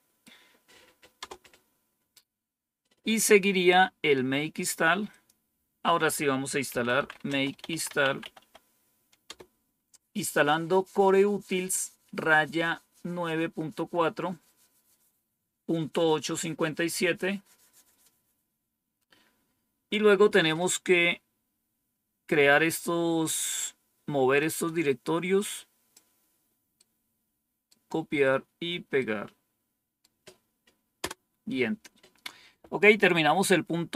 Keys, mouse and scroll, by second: 1.1 Return, 5.0 click, 6.4-8.8 typing, 9.2 Return, 21.3-22.0 scroll down 1, 24.3-25.9 drag, 26.7 right click, 28.9-29.9 right drag, 30.9 Return.